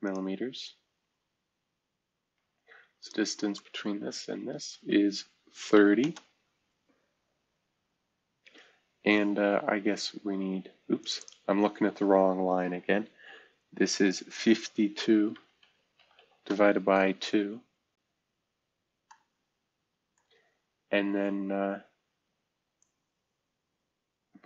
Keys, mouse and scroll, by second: 0.4-2.7 scroll down 2, 2.9-3.5 ctrl+drag, 4.2-5.7 typing, 6.0 Return, 9.0 scroll down 1, 11.0 click, 15.3-16.3 typing, 16.4 Return, 17.9 scroll up 1, 18.2 typing, 22.7-24.4 drag.